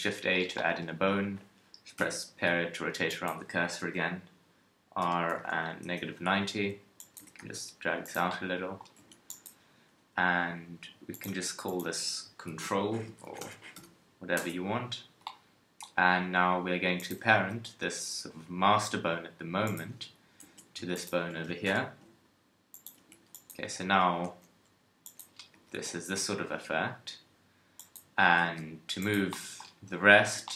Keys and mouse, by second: 2.0 ., 3.8 r, 7.2 g, 9.0 Tab, 9.8 KP_3, 17.0 right click, 17.4 g, 19.1 click, 20.4 Tab, 21.7 ctrl+p, 23.0 Tab, 23.9 KP_3, 24.3 g, 25.5 g, 28.4 g, 30.2 Tab.